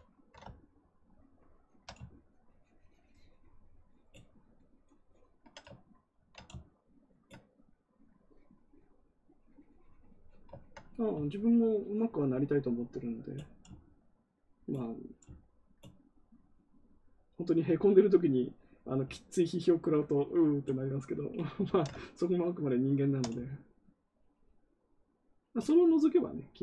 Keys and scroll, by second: 6.0 ctrl+z, 21.5 ctrl+z.